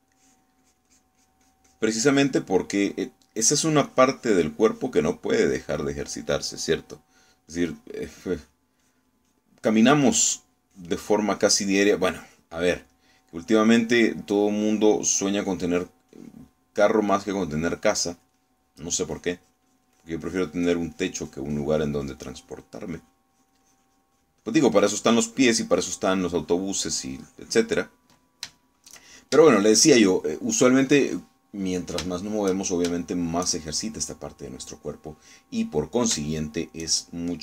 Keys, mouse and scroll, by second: 0.6 s, 1.1-3.5 drag, 4.9 click, 5.7 click, 6.5 click, 8.5 click, 9.3 click, 9.9 click, 10.3 click, 11.3 click, 11.8 click, 12.4 click, 13.3 click, 14.0 middle click, 14.5 click, 15.3 click, 16.1 click, 16.5 click, 17.9 click, 19.4 click, 19.4 middle click, 20.2-21.6 drag, 21.7-24.3 drag, 27.2-29.3 drag, 30.6 shift+middle click, 31.5-33.1 shift+middle drag, 33.2 shift+middle click, 34.0 shift+middle click, 35.2 shift+middle click, 36.0-37.1 middle drag.